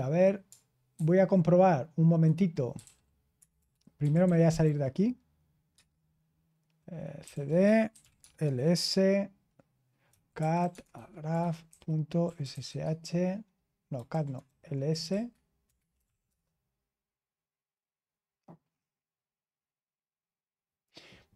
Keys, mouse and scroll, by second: 0.9 super+1, 2.5-5.1 typing, 5.7 Return, 6.9-13.0 typing, 14.1 typing, 14.4 ctrl+a, 15.9 alt+f, 15.9-16.2 typing.